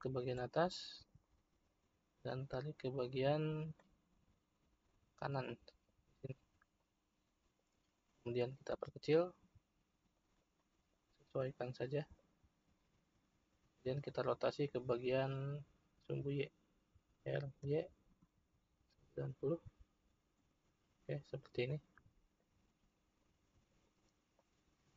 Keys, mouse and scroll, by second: 0.6-2.2 middle drag, 2.2 click, 4.5-5.5 scroll up 3, 5.5-6.7 shift+middle drag, 6.7 click, 8.7 s, 10.5-11.4 middle drag, 11.4 click, 17.1 r, 21.7-23.2 middle drag, 23.2 click, 24.3 click.